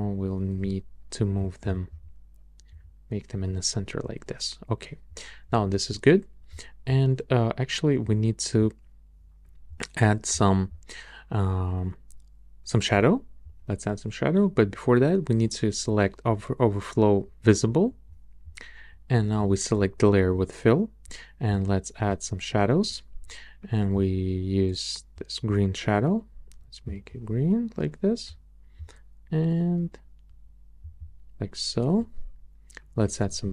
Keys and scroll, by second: 0.6 alt+Left, 1.3 alt+Left, 2.7 alt+Right, 33.4 shift+Up.